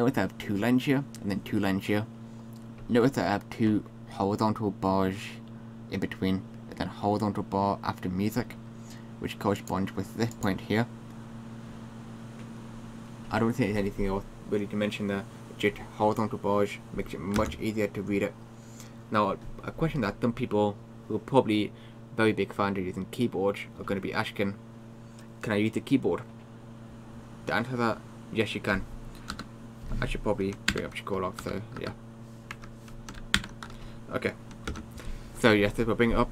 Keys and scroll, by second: 34.7 super+space.